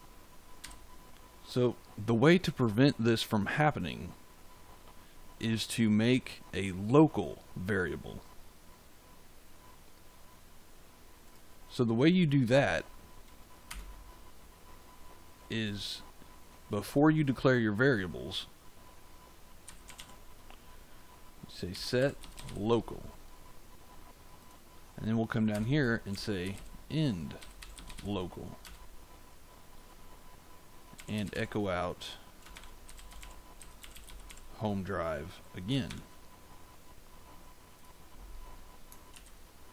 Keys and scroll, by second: 0.5 f, 13.6 Return, 19.3-20.4 typing, 21.4-22.9 typing, 25.5 Return, 25.8-28.4 typing, 28.6 Return, 30.6-34.7 typing, 35.8 shift+5, 39.1 ctrl+s.